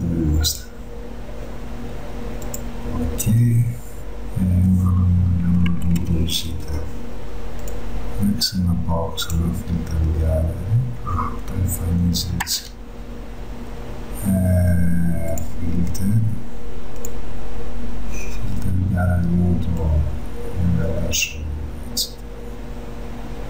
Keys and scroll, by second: 5.9 ctrl+z, 12.5 ctrl+z, 13.3 ctrl+z.